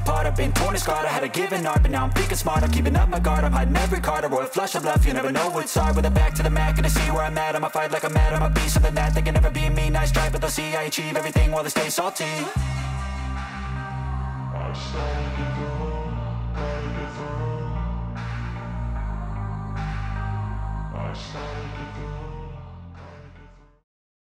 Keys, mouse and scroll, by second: 1.6 middle click, 3.0 middle click, 4.0-4.9 shift+middle drag, 6.1-7.7 ctrl+middle drag, 9.8-10.3 middle drag, 14.5 middle click, 16.5 ctrl+middle click, 18.1 shift+middle click, 20.2-24.4 middle drag.